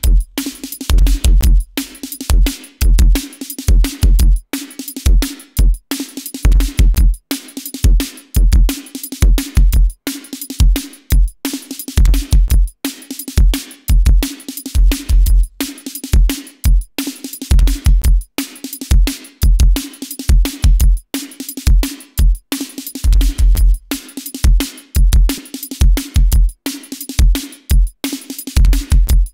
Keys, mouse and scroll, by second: 2.3-3.0 drag, 3.2 click, 5.2-9.5 drag, 9.8-10.9 drag, 11.3-12.5 drag, 14.4 click, 15.1 click, 16.1 click, 16.9-18.9 drag, 20.4-20.8 drag, 23.3 click, 24.4 click, 26.6-29.3 drag.